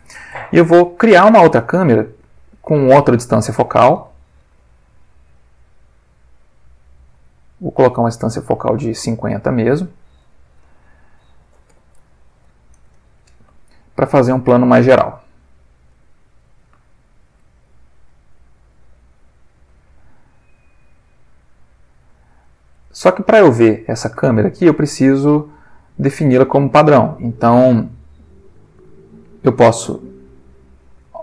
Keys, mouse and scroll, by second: 1.6-2.7 middle drag, 3.2-3.8 middle drag, 4.4 shift+a, 6.9 click, 8.7-10.3 ctrl+middle drag, 10.6 alt+r, 11.7 r, 12.0 x, 12.3 9, 12.4 0, 12.9 Return, 13.7 ctrl+middle click, 14.5 ctrl+g, 15.5-16.9 drag, 16.0-18.3 middle drag, 18.7 r, 19.7 Escape, 21.0 click, 22.4 middle click, 24.9-25.7 middle drag, 26.2 right click.